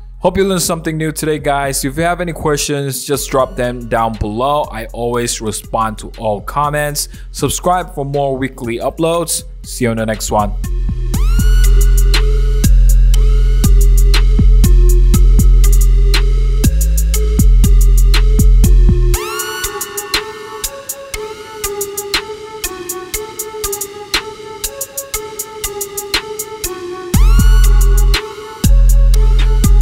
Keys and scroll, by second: 5.7 5, 7.1 BackSpace, 7.7 4, 8.2 BackSpace, 8.9 BackSpace, 10.1 BackSpace.